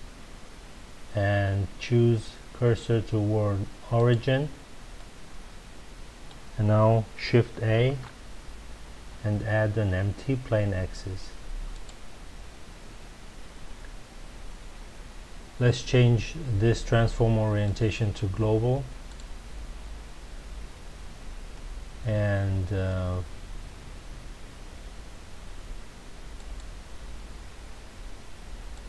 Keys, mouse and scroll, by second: 4.9-7.8 middle drag, 7.8 shift+a, 17.6-20.6 drag, 26.3 click, 28.7 click.